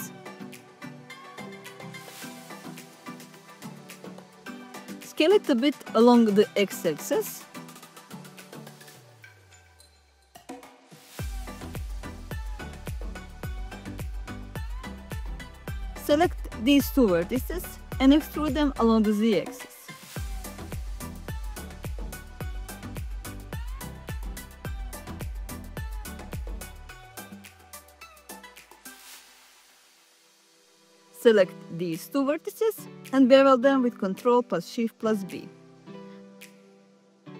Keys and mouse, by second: 0.8-3.1 typing, 3.5 Return, 4.4 click, 6.9 click, 10.9 a, 13.1 s, 13.4 x, 15.9 click, 16.6 middle click, 16.9 s, 16.9 x, 17.4 click, 21.0 e, 21.4 z, 23.2 click, 26.8 click, 29.5 shift+click, 30.3 ctrl+z, 32.3 ctrl+shift+b.